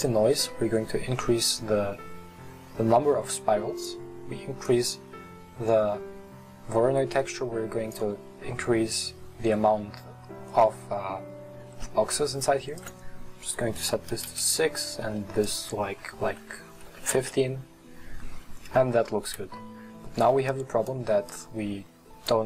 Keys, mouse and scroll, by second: 5.2-7.8 drag, 14.3-20.7 drag, 21.3 click.